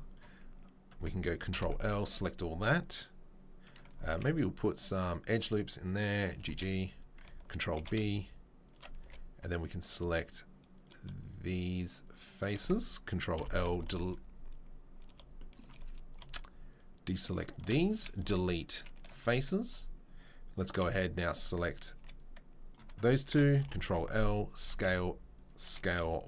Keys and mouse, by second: 1.5 ctrl+l, 2.8-16.4 middle drag, 4.1 ctrl+r, 6.3 g, 7.8 ctrl+b, 9.0 3, 13.4 ctrl+l, 13.8 Delete, 17.6-26.2 middle drag, 19.1 Delete, 20.8 c, 21.9 c, 23.6 ctrl+l, 24.6 s.